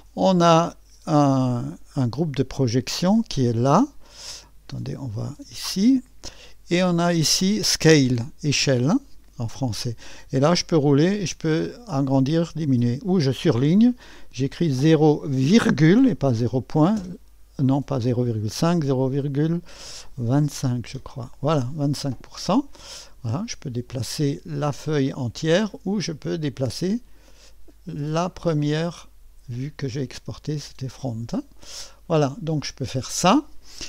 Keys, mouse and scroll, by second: 0.0 click, 1.7 click, 4.8 click, 5.7 click, 9.0 click, 10.4-11.7 scroll down 1, 11.7-12.9 scroll up 1, 12.9 click, 14.5-15.6 typing, 16.9 typing, 18.6 BackSpace, 20.6 2, 20.9 5, 23.3-25.6 drag, 23.7-24.0 typing, 25.6 typing, 28.2-31.1 drag.